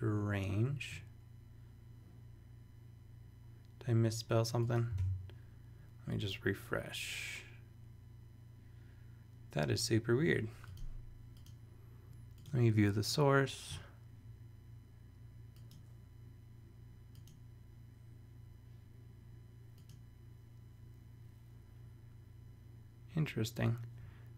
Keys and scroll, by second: 5.0 super+r.